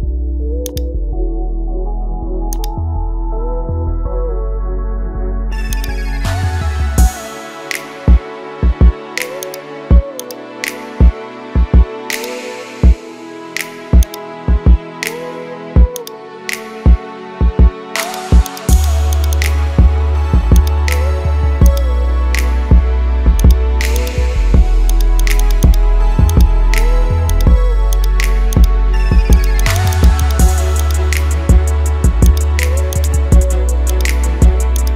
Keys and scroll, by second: 3.6 ctrl+z.